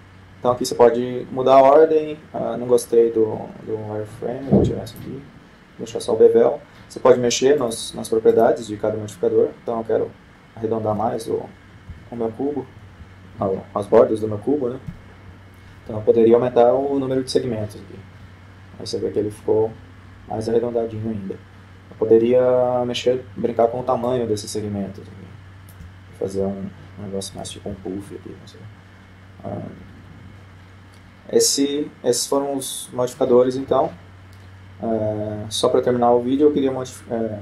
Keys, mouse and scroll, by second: 0.0 shift+space, 1.0-2.8 middle drag, 5.7-7.1 drag, 8.4-10.5 drag, 11.3-12.7 middle drag, 11.3-12.6 scroll down 1, 12.6 scroll down 1, 12.8 KP_4, 16.8 F12, 25.0-26.4 drag, 29.0 F12.